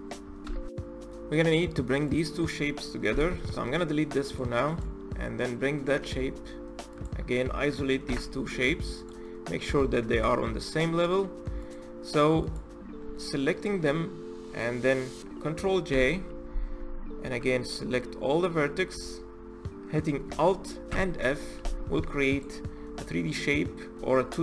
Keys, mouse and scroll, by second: 1.9 click, 2.9 Delete, 4.1 click, 4.5 click, 4.9-5.4 scroll down 5, 5.4-6.7 middle drag, 6.7 shift+click, 7.9 KP_Divide, 8.8 click, 9.0-9.9 middle drag, 9.9 KP_1, 10.8-11.4 middle drag, 11.4 click, 12.2 click, 13.3 shift+click, 14.2-15.7 middle drag, 15.7 ctrl+j, 17.0 Tab, 18.7 a, 20.7 alt+f, 21.8 Tab, 22.0 click, 22.6-22.9 scroll up 1, 22.9-24.4 middle drag.